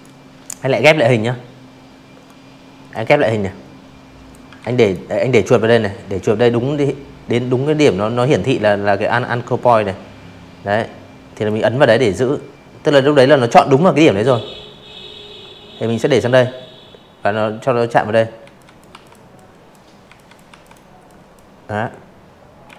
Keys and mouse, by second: 1.6 ctrl+z, 1.8 click, 8.4-14.9 drag, 15.4 z, 15.6 click, 15.9 v, 16.0 click, 16.3 click, 17.0 z, 17.1 click, 17.5 v, 17.5 click, 18.0 click, 19.6 a, 19.8 click, 21.0 v, 21.1 click, 22.0-22.5 drag.